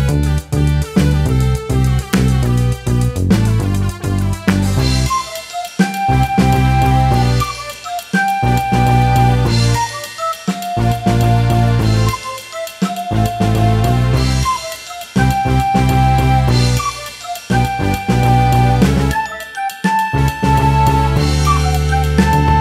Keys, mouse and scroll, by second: 0.0-12.5 typing, 0.1 shift+click, 1.0 shift+middle click, 1.5 shift+middle click, 1.6 click, 1.8 scroll up 2, 2.2 shift+middle click, 3.5-4.0 scroll down 2, 4.6 scroll down 1, 4.7 shift+middle click, 4.8 scroll up 3, 5.2 shift+click, 6.0 scroll down 3, 6.0 shift+middle click, 6.1 scroll up 2, 6.2 shift+middle click, 6.3 shift+middle click, 6.4 scroll down 1, 6.9 shift+middle click, 7.4 middle click, 7.7 middle click, 8.2 scroll up 2, 8.3-8.7 scroll down 2, 8.9 middle click, 9.4 scroll down 1, 9.4 shift+middle click, 9.4 scroll up 2, 9.9 shift+middle click, 10.1 scroll down 2, 10.4 shift+middle click, 10.9-11.2 scroll down 1, 11.2 scroll up 3, 11.5 shift+middle click, 11.7 shift+click, 12.6 scroll down 2, 12.6 shift+middle click, 12.7 scroll up 3, 12.8 click, 13.0 scroll down 1, 13.1 shift+middle click, 13.2 scroll up 2, 13.3 shift+middle click, 13.5-18.2 typing, 14.2 scroll down 6, 14.6 shift+middle click, 14.6 scroll up 4, 14.8 shift+middle click, 15.1 scroll down 1, 15.2 shift+middle click, 15.2 scroll up 1, 15.5 shift+middle click, 15.8 scroll down 1, 15.9 shift+middle click, 16.7-17.1 scroll down 2, 16.7 shift+middle click, 17.1 shift+middle click, 17.7 scroll up 2, 18.0 shift+middle click, 18.4 scroll down 2, 18.5 shift+middle click, 18.7 scroll up 1, 19.8-21.7 typing, 19.9 shift+middle click, 20.9 shift+middle click, 21.0-21.5 scroll up 4, 21.1 shift+middle click, 21.6 shift+middle click, 21.9 shift+middle click, 22.1 click, 22.4 shift+middle click, 22.5 scroll up 5.